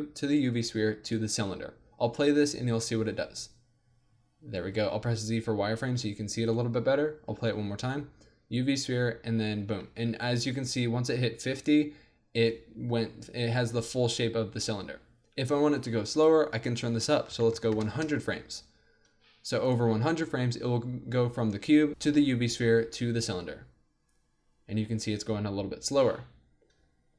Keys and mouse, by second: 0.2-4.6 drag, 2.2 alt+a, 4.6 z, 6.2 alt+a, 6.5-8.0 drag, 7.4 alt+a, 8.1 click, 9.7 alt+a, 10.9-13.0 drag, 15.7-17.7 drag, 17.7 KP_0, 19.6-23.3 drag, 23.3 alt+a.